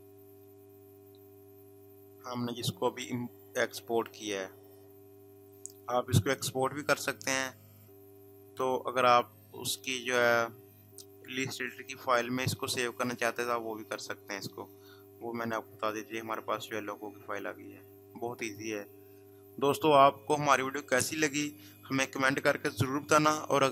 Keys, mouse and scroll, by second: 9.9 click, 13.7 scroll down 1, 18.5 click.